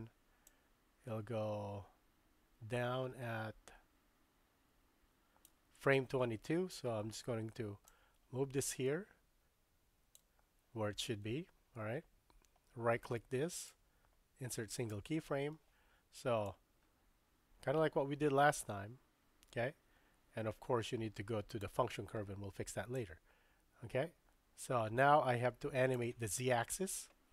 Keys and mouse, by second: 0.5-5.6 drag, 7.9-10.2 drag, 13.5-14.9 right drag, 16.5-21.7 drag, 23.0-26.1 drag.